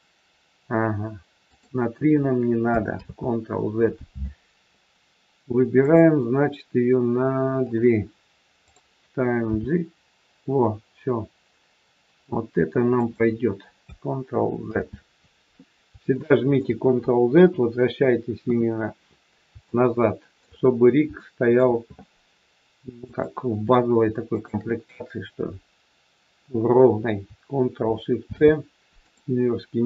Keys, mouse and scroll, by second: 2.9 ctrl+z, 5.7 click, 7.6 click, 9.4 g, 14.6 ctrl+z, 16.1 shift+middle click, 17.3 KP_1, 18.4 KP_3, 19.6 shift+middle click, 22.9 click, 24.3 shift+click, 29.1 ctrl+shift+c.